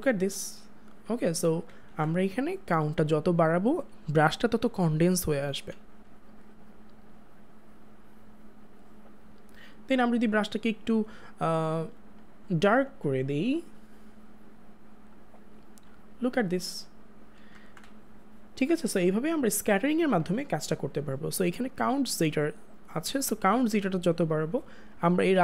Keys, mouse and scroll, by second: 1.5 click, 1.7 ctrl+z, 3.0 click, 10.7 click, 17.5 click, 17.6 ctrl+z, 23.2 ctrl+z.